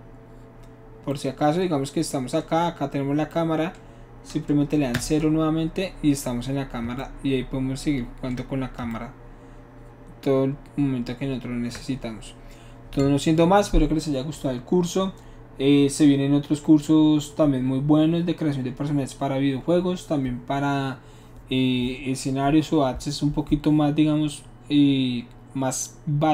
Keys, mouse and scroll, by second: 4.9 KP_0.